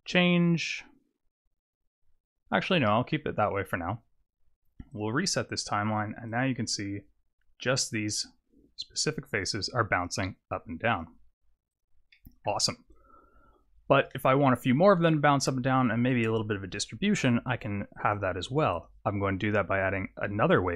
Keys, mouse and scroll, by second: 2.8 middle click, 3.3-4.9 scroll down 1, 4.9 click, 4.9-5.8 scroll down 1, 6.2 click, 11.0 click, 11.7 click, 12.1 middle click, 13.1-14.1 scroll up 1, 16.3-18.1 scroll down 1, 18.1 click, 18.7 click.